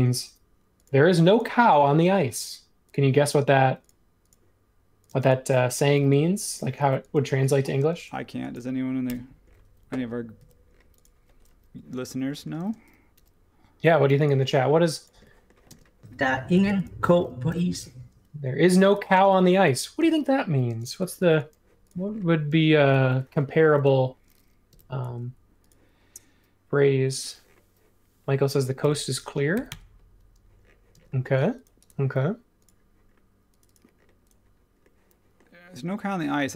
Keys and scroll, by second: 1.4 Escape, 5.1 space, 5.9 p, 6.8 e, 9.0 BackSpace, 10.4 super+1, 12.6 space, 13.1 l, 15.1 ⟲, 15.7 space, 17.4 p, 18.9-21.2 typing, 22.5 space, 23.7 super+1, 24.7 m, 28.8 x, 29.5 4, 29.7 Return, 30.9 space.